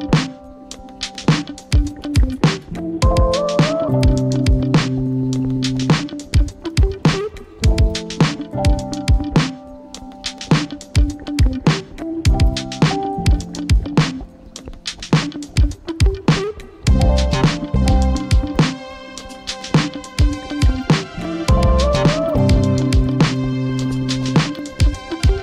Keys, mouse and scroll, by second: 1.3-8.2 typing, 9.4-9.8 Down, 9.9 Down, 10.0 Down, 10.4-11.6 Right, 12.0 Right, 12.4-16.1 typing, 16.6 Tab, 18.1 ctrl+o, 18.7 Return, 20.7 ctrl+x, 21.7-25.1 typing, 24.5 Return.